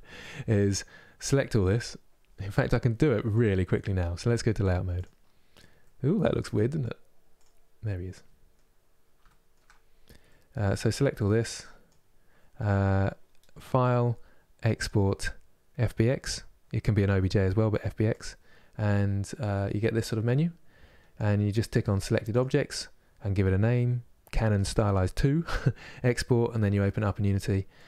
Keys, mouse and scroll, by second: 4.7 click, 5.5-7.0 middle drag, 7.0 click, 7.5-9.5 middle drag, 9.5-9.9 scroll up 1, 9.9-11.5 middle drag, 11.5 click.